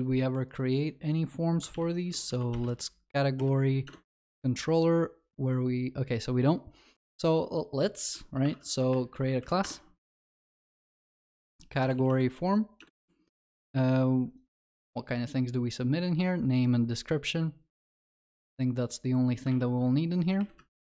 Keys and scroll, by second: 1.8 ctrl+shift+n, 8.5 alt+Insert, 15.2 ctrl+b, 18.3 ctrl+c.